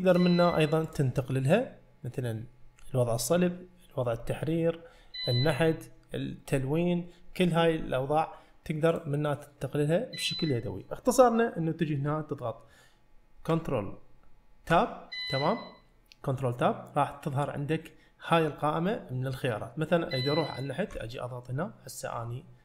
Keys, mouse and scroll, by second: 0.0-6.6 drag, 9.0-10.3 drag, 14.8 ctrl+Tab.